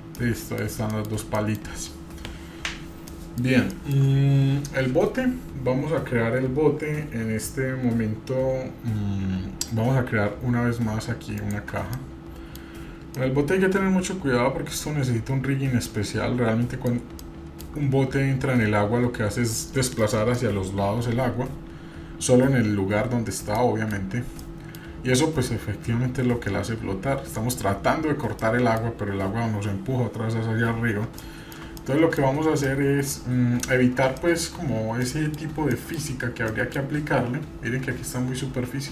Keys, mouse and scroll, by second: 0.0 scroll down 1, 0.1-0.6 middle drag, 1.0 shift+middle drag, 1.5 middle click, 1.9 scroll up 1, 2.0-2.4 scroll down 1, 2.4-3.1 scroll up 3, 3.1 middle click, 3.5 scroll down 1, 3.6 scroll up 1, 3.7 shift+middle click, 11.3-11.6 shift+right drag, 11.9-12.6 middle drag, 12.6-13.1 scroll down 1, 13.2-16.8 middle drag, 17.2-17.6 shift+middle drag, 23.5-23.9 middle drag, 24.4 middle click, 24.4 scroll down 1, 28.4-28.9 middle drag, 30.5-30.9 scroll up 1, 31.3-31.6 shift+middle drag, 31.8-32.2 middle drag, 32.4 scroll up 1, 32.6 middle click, 34.2 middle click, 34.4-35.0 scroll down 3, 35.0 middle click, 35.7 middle click, 36.1-38.8 scroll up 6, 36.5 middle click.